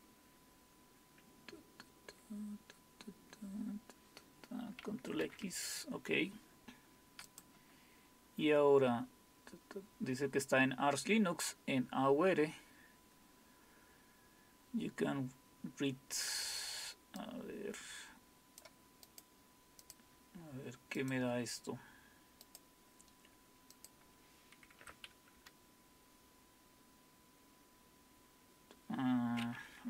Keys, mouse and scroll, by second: 5.2 ctrl+x, 7.3 click, 8.2 scroll down 1, 12.6-13.4 scroll down 1, 13.4-17.2 scroll down 1, 17.2-18.6 drag, 19.1 right click, 19.8 click, 21.0 click, 21.2 click, 22.5 right click, 23.7 click, 24.8 Tab.